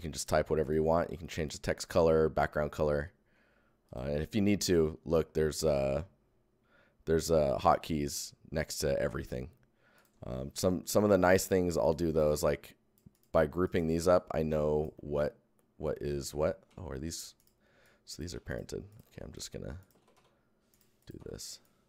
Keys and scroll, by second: 0.1 Tab, 10.3 Tab, 10.8 Tab, 11.9 Tab, 16.6 ctrl+Tab, 16.6 ctrl+z, 17.1 Tab, 18.2 ctrl+Tab, 18.3 ctrl+z, 18.9 Tab, 19.3 Tab, 19.9 ctrl+Tab, 19.9 ctrl+c, 20.1 ctrl+v, 20.6 Tab.